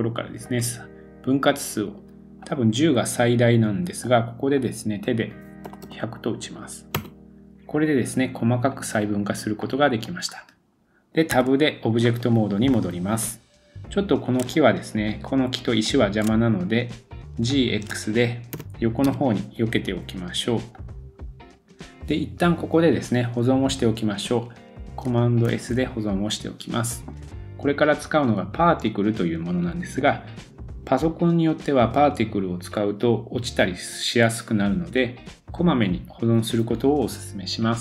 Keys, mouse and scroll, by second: 0.9-2.0 drag, 2.5-3.0 drag, 5.8 0, 8.7 click, 9.6 middle click, 10.2-10.7 scroll up 4, 10.7 scroll down 1, 11.3 Tab, 11.7 scroll down 2, 12.7 middle click, 12.7 scroll down 2, 13.4 scroll up 1, 14.5 shift+click, 14.5-14.8 shift+scroll up 1, 15.1 shift+click, 15.7 shift+click, 16.4-17.0 scroll down 1, 17.0-17.5 shift+middle drag, 17.5 shift+click, 18.5 g, 21.1 scroll down 1, 21.5 super+s, 25.5 super+s.